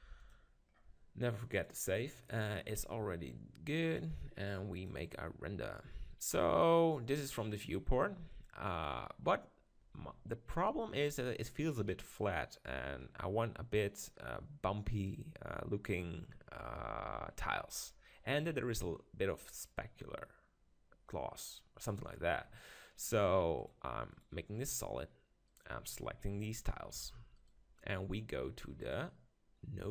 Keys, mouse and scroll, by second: 0.0 g, 0.3-3.4 drag, 3.9-5.8 drag, 13.0 middle click, 22.3-23.6 middle drag, 23.6-25.3 drag, 25.5-27.3 right drag, 26.9 g, 27.5-29.4 right drag, 28.8-29.9 drag.